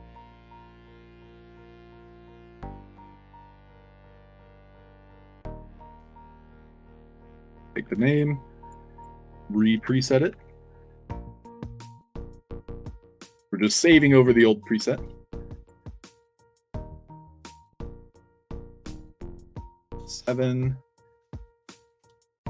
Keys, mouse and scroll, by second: 0.8 scroll down 2, 1.3 click, 1.8 click, 2.3 click, 2.7-3.1 drag, 3.4 ctrl+v, 4.7 ctrl+v, 5.7 1, 7.3 click, 7.5 click, 7.8 ctrl+c, 8.5 click, 8.9 click, 9.5 click, 9.7 ctrl+v, 10.0 click, 10.3 ctrl+v, 12.0 click, 12.2 ctrl+v, 12.8 click, 15.5 click, 15.8 click, 17.1 o, 18.2 click, 19.2 click, 20.3 click, 21.8 click, 22.2 ctrl+c.